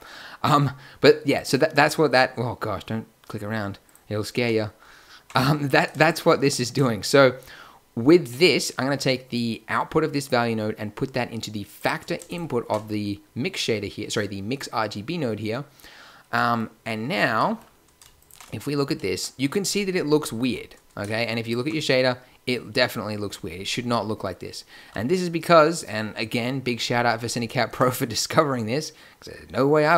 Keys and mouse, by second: 5.9-10.9 middle drag, 12.2-14.0 drag, 18.1 click, 27.5 shift+a.